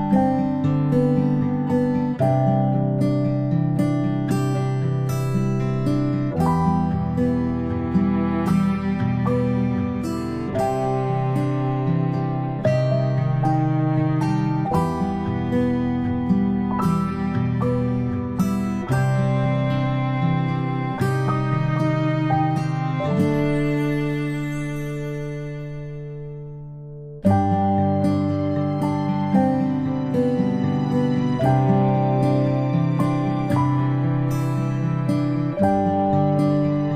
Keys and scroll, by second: 3.2 space, 3.5 space, 10.8 ctrl+alt+d, 12.3 d, 17.9 space, 18.1 space, 18.1 space, 20.5 a, 24.1-24.6 space, 32.2 ctrl+space, 32.5 ctrl+space, 33.3 a.